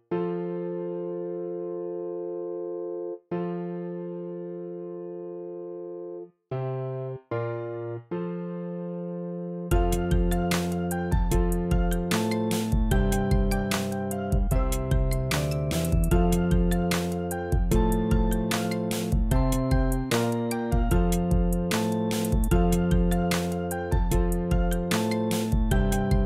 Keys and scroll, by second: 0.1 shift+Up, 0.8 Up, 1.3 v, 1.9 Up, 10.0 b, 14.0 super+z, 18.0 super+z, 23.5 z.